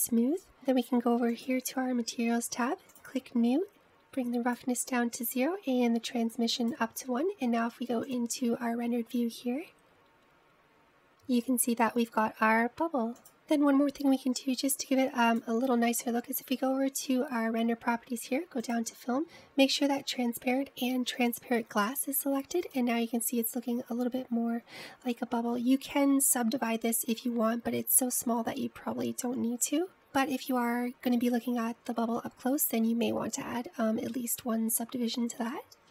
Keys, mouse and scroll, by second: 2.4 click, 4.0-4.9 drag, 6.1-6.8 drag, 6.8-8.3 scroll down 5, 8.3-10.5 drag, 16.4 click, 19.4-22.4 drag, 23.8 click, 29.9-31.7 scroll up 2, 31.7-32.8 scroll up 2, 34.8-35.6 scroll down 1, 35.6-35.9 scroll down 13.